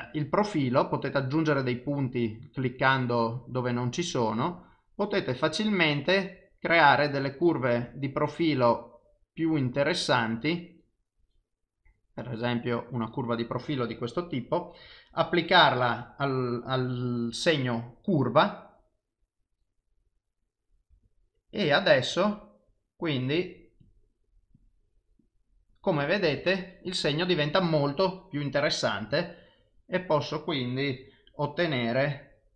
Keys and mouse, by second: 14.4 click, 19.4 click, 29.1 click.